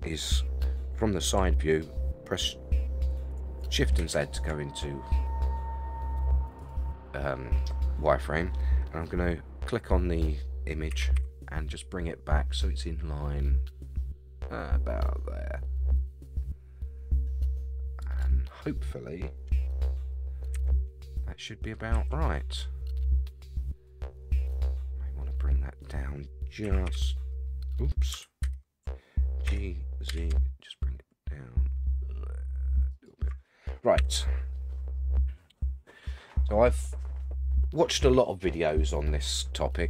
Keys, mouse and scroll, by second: 4.0 shift+z, 6.6 click, 10.9 g, 20.5 KP_1, 21.9 KP_3, 26.6 h, 26.8 y, 28.4 ctrl+z, 29.4 g, 33.9 KP_1.